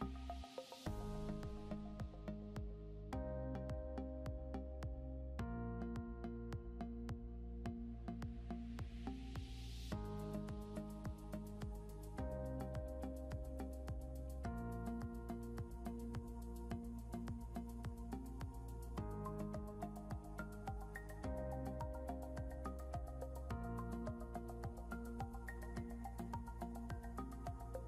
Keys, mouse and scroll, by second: 4.6 c, 7.0 c, 16.1 scroll up 1.